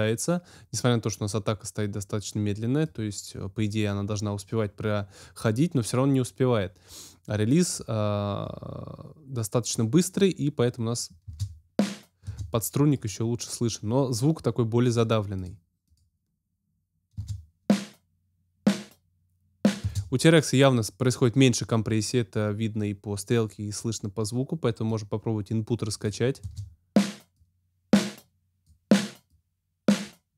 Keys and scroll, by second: 11.2 space, 17.1 space, 19.8 space, 26.4 space.